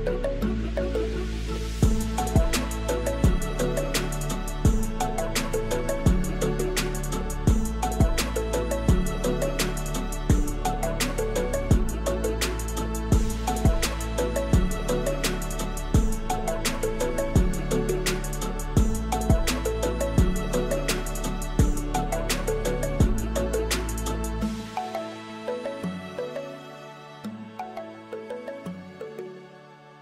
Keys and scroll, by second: 2.5 Tab, 8.6 Tab, 9.2 Tab, 9.5 a, 9.9 Tab, 11.5 alt+a, 13.7-15.5 typing, 16.0 alt+a, 17.3 Tab, 20.8 Tab, 22.1 alt+a, 23.4 3, 23.5 shift+z, 24.2 g, 25.1 shift+z, 25.9 alt+a, 27.4 r, 27.7 z, 28.6 alt+a.